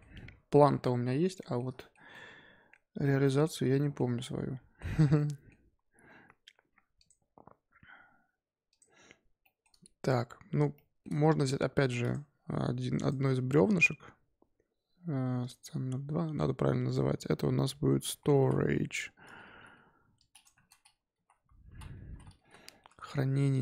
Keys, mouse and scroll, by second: 3.4-3.7 shift+scroll down 1, 3.7-4.8 shift+middle drag, 4.8 scroll up 1, 5.0 scroll down 1, 5.1-6.9 middle drag, 6.9 click, 8.7 click, 9.4-12.0 shift+middle drag, 12.0 click, 13.0 click, 15.9-16.8 scroll up 3, 16.8-20.0 drag, 23.5 click.